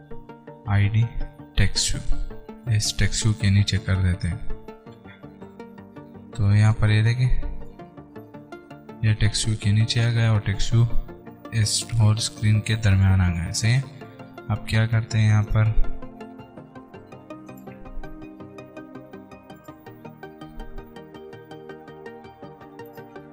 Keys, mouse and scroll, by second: 6.6 Return, 13.1 Return, 15.8 click, 20.9 alt+Return, 23.2 click.